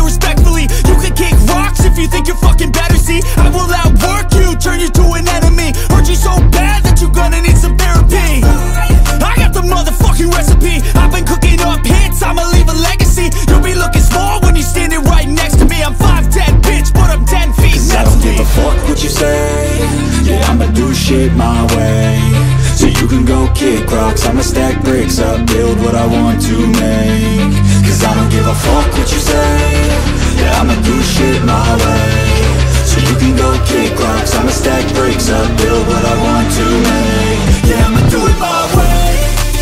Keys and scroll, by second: 1.0 Up, 2.0 Right, 2.6 Left, 5.7 ctrl+g, 5.9-7.8 typing, 9.0 ctrl+t, 10.2 ctrl+t, 11.4 ctrl+t, 13.4 ctrl+g, 13.7 h, 13.8 Return, 23.3-24.5 typing, 25.0 ctrl+t, 27.6-28.9 typing, 29.4 ctrl+t, 30.1 alt+Caps_Lock, 35.7 ctrl+t, 37.0 ctrl+t, 38.1 Down, 38.2 Right.